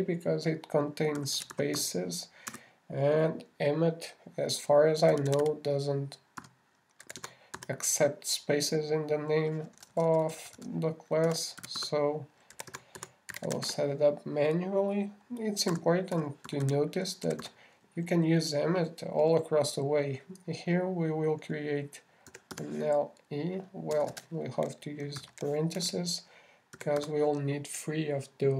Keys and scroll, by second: 26.1 shift+BackSpace, 26.5 shift+8, 27.2 shift+9, 27.9 shift+Left.